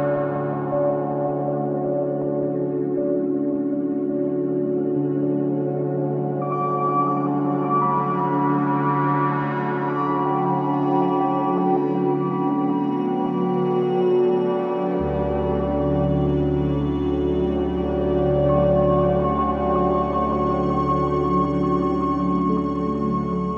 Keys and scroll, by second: 0.9 space, 3.3 ctrl+KP_2, 18.3 ctrl+space, 19.7 v, 22.6 alt+shift+space.